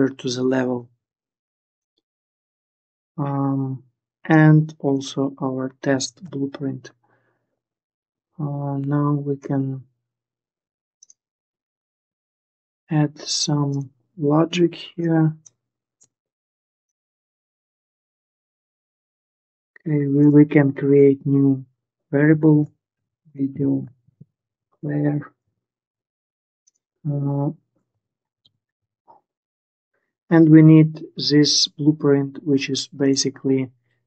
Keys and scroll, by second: 0.7 ctrl+s, 5.9 ctrl+s, 15.8 Delete, 22.0-25.0 typing, 25.1 Return, 27.7-29.0 typing.